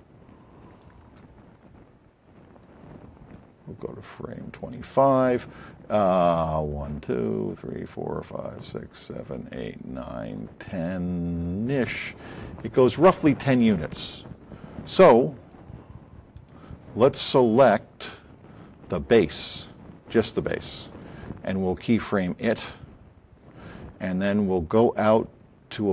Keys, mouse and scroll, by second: 3.3-4.8 drag, 12.3 click, 15.4 click, 19.0 click.